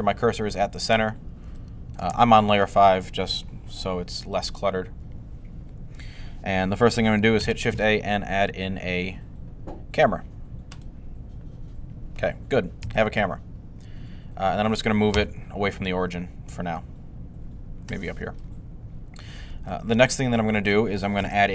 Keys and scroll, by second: 7.2 a, 15.0 g, 21.0 a.